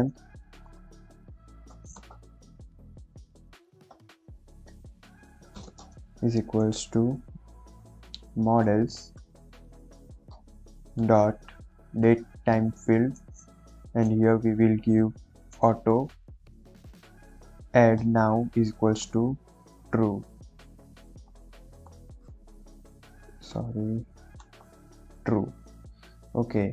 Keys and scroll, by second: 0.0-2.0 typing, 4.2 m, 5.3 p, 5.5 space, 5.6 =, 5.7 space, 8.5 m, 8.7 o, 8.9 d, 9.1 e, 9.6 Down, 9.8 Down, 10.2 Return, 12.0 Tab, 12.9 shift+9, 13.1 shift+0, 13.4 Left, 16.1 a, 16.3 u, 17.3 Down, 17.4 Down, 17.9 Return, 19.4 shift+t, 19.7 e, 20.8-23.1 typing, 24.3 r, 24.6 u, 24.6 e, 25.4 Right.